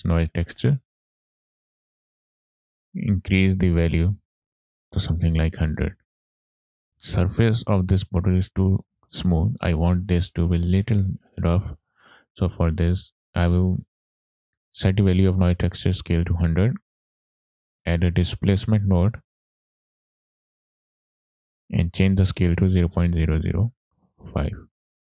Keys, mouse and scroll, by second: 1.2 click, 1.4 middle click, 1.5 middle click, 1.8 click, 2.4 middle click, 2.5-2.8 scroll up 4, 2.9 middle click, 4.0-6.3 drag, 5.7 KP_0, 6.6 scroll down 2, 6.7 middle click, 12.6 click, 13.5 middle click, 16.6 click, 16.9 shift+a, 20.6-21.2 scroll up 2, 20.9 click, 21.7-24.4 drag, 23.2 KP_0, 24.9 scroll down 3, 25.0 middle click.